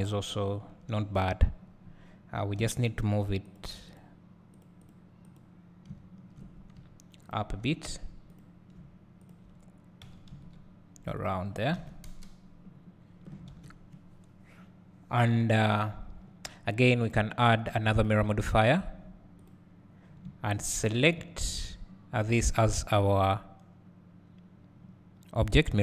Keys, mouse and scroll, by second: 0.0 `, 1.5-2.6 scroll up 2, 3.6 click, 4.9 click, 7.3 shift+click, 8.4 click, 9.3 shift+click, 10.1 g, 11.7 alt+a, 12.1 KP_0, 13.1 scroll up 1, 15.7 click, 19.5-25.5 drag, 20.1 scroll down 1, 20.2 `.